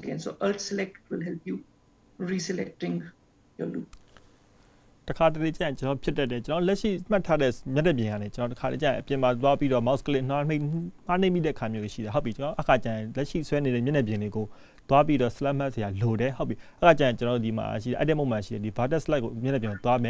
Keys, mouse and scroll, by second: 10.3 click, 13.5 alt+click.